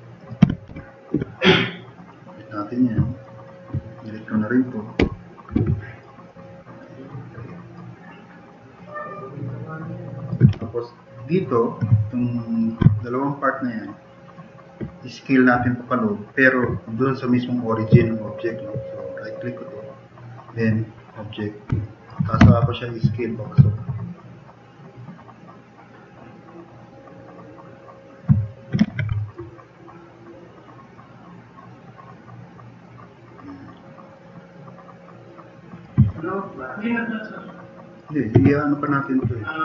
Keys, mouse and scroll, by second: 0.2-1.6 typing, 1.5-2.1 drag, 3.9 click, 4.0-4.7 typing, 5.0 Delete, 5.8-6.8 drag, 7.4-7.8 drag, 8.0 click, 8.8-10.3 drag, 10.6 2, 12.9-14.3 drag, 17.9 drag, 21.3 click, 21.8 middle drag, 22.4 t, 22.7 drag, 28.9 ctrl+z, 38.4 2.